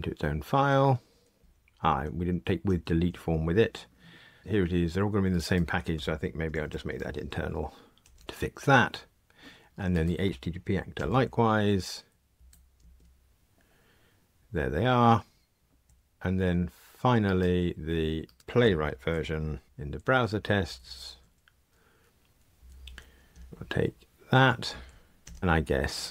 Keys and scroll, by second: 2.6 super+[, 10.9 alt+Return, 21.7 alt+Return, 25.2 super+[.